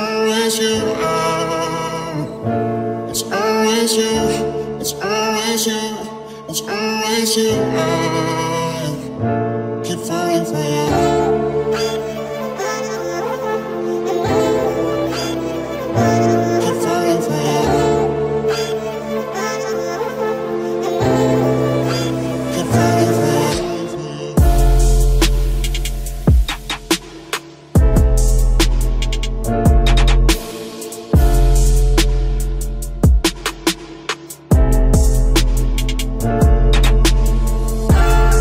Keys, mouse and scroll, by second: 1.6 c, 7.4-9.9 drag, 8.4 c, 17.2 right click, 17.4-22.3 middle drag, 19.0 c, 24.9-27.3 right drag, 25.7 c, 26.6 ctrl+s, 28.1 KP_Decimal, 31.0 i, 32.9 z, 33.6-34.8 drag, 34.8 KP_3, 35.0 z, 36.4 middle click.